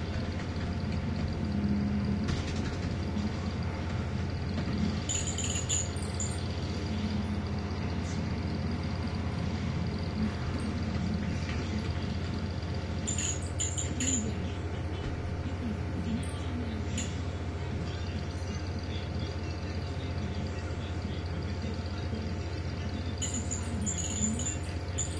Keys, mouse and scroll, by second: 0.0-2.4 typing, 4.0 i, 4.3 b, 8.7-10.1 drag, 10.8-12.8 typing, 14.3 click, 16.7 click, 21.7 click, 23.0 click.